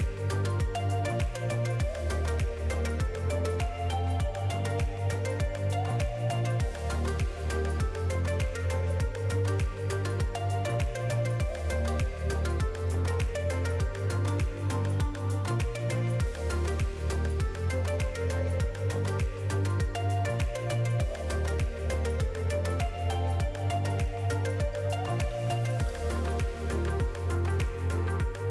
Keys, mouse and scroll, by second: 2.5 click, 14.5 middle click, 15.0-15.5 scroll up 1, 15.5 middle click, 15.5-15.9 scroll up 2, 16.6 middle click, 18.2 click, 19.4 middle click, 21.5 alt+a, 23.0 l.